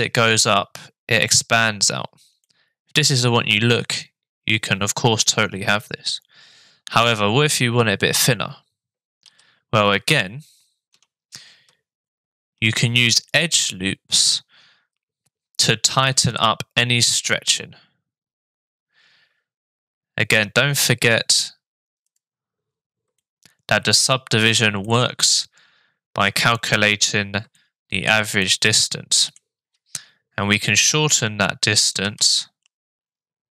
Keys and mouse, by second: 2.4 middle click, 9.2 shift+r, 11.0 Tab, 12.5 ctrl+r, 23.2 shift+middle click, 24.8-26.3 middle drag, 27.5 shift+middle click, 28.4 middle click, 32.0 g.